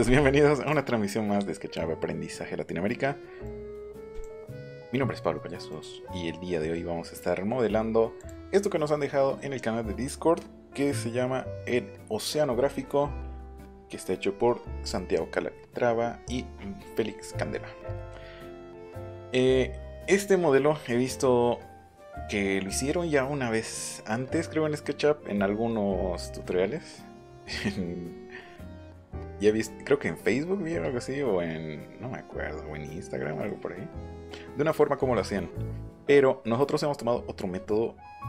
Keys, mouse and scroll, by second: 0.6 click, 3.4 click, 4.1 click, 5.7 click, 8.2 click, 17.5-17.9 scroll down 4, 25.8-28.2 scroll down 7, 36.7-37.6 scroll down 6.